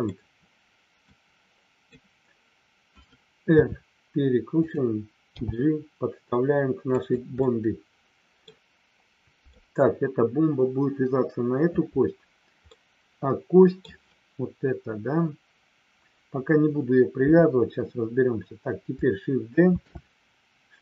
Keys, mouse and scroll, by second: 1.1 click, 4.5 click, 6.9 click, 7.3-8.5 middle drag, 8.5 middle click, 12.7-13.9 middle drag, 17.1 KP_3, 19.7 shift+d.